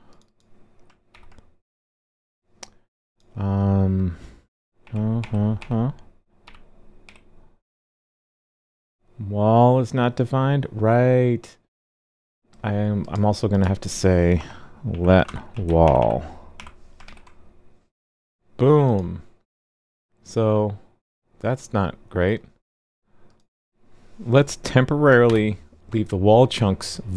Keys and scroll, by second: 1.1 super+c, 4.8 super+d, 5.2 super+d, 5.6 super+d, 6.4 super+v, 7.0 super+s, 17.0 super+s, 25.2 super+/.